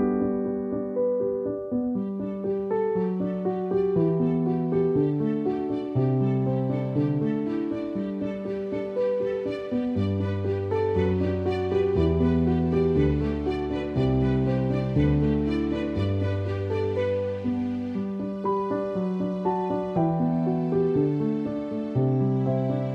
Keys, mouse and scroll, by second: 0.0-1.8 typing, 3.2 [, 10.0 space, 10.2 click, 10.3 space, 12.2 space, 12.4 click, 12.6 space, 14.0 click, 14.2 space, 17.9 space, 18.1 click, 18.3 space, 20.0 click, 20.0 space, 21.0 click, 21.9 click, 22.1-22.9 typing.